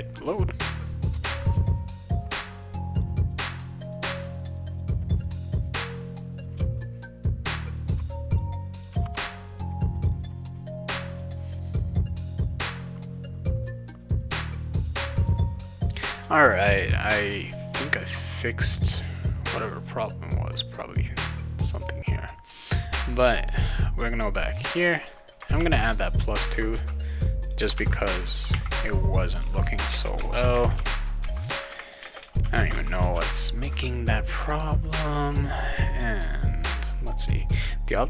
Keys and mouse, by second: 2.4 click, 2.9 click, 3.3 click, 3.6 click, 4.5 click, 4.5 click, 4.7 click, 4.9 click, 6.4 click, 7.5 click, 7.6 click, 7.8 click, 10.0 click, 10.1 click, 10.6 click, 11.1 click, 12.4 click, 13.6 click, 14.0 click, 14.1 click, 14.7 click, 14.8 click, 15.2 click, 15.5 click, 16.5 click, 24.4 click, 25.6 shift+9, 26.4 click, 26.7 shift+0, 27.4 click, 27.7 shift+0, 28.3 click, 28.5 shift+9, 29.3 click, 29.9 space, 30.4 shift+=, 30.5 space, 30.7 2, 32.0 space, 32.4 shift+=, 32.5 space, 32.7 2, 33.1 ctrl+s, 37.1 click, 37.3 click.